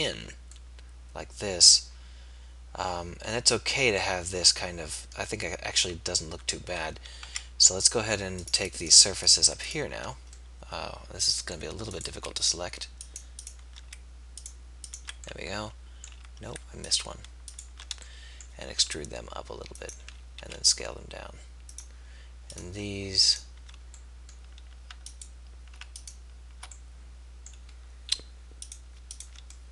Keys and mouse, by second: 0.2 z, 7.4 z, 10.7-11.9 middle drag, 18.7 e, 20.4 s, 27.7-29.7 middle drag.